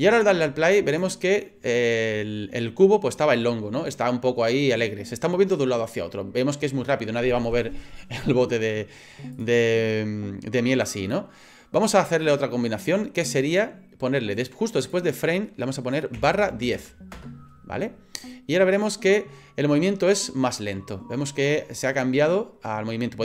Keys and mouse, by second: 0.9 click, 9.3 click, 10.8 click, 12.2-17.8 drag, 18.7 click.